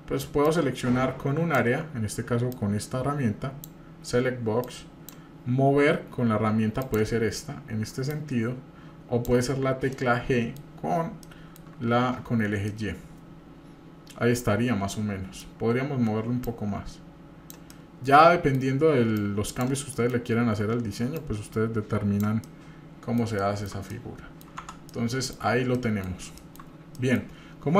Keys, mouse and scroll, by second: 0.5-1.6 drag, 2.5-3.8 drag, 4.6 click, 6.8 click, 8.1-9.3 drag, 9.9 middle click, 10.8-11.1 scroll up 1, 11.2 shift+middle click, 11.9-12.3 scroll up 1, 12.7-15.4 shift+middle drag, 16.4-17.5 drag, 17.7 middle click, 19.2 click, 19.9 middle click, 21.1-22.2 drag, 22.4 middle click, 23.4 shift+middle click, 23.9 middle click, 24.7 Tab, 24.9 middle click, 25.5 scroll down 2, 25.7 middle click, 26.4 shift+middle drag, 26.9 middle click.